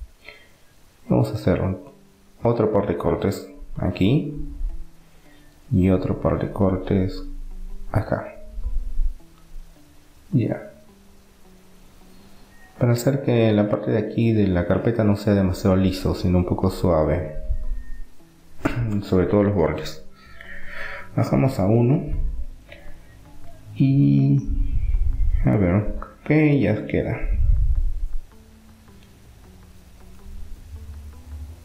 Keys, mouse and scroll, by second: 1.1 ctrl+r, 5.7-7.7 middle drag, 8.1 ctrl+r, 10.9-12.7 drag, 12.7 middle click, 13.4-17.8 middle drag, 20.2 click, 21.1-22.4 middle drag, 22.4 click, 22.9 click, 23.7-25.1 right drag, 24.1-25.1 drag, 25.1-28.4 middle drag, 27.1 Tab, 29.4-31.6 middle drag.